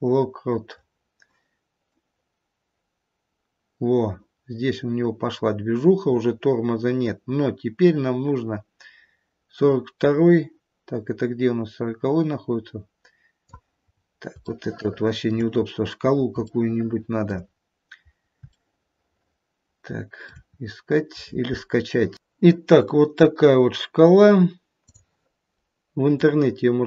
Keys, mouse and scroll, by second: 1.8 click, 13.9 scroll up 3, 14.5 shift+middle click, 15.3 shift+middle click, 15.6 scroll up 1, 15.7 scroll down 1, 15.8-16.2 scroll down 1, 16.5 shift+middle click, 17.4-18.0 scroll down 1, 18.0 scroll down 1, 18.9 shift+middle click, 20.1 shift+middle click, 20.5-21.0 scroll up 1.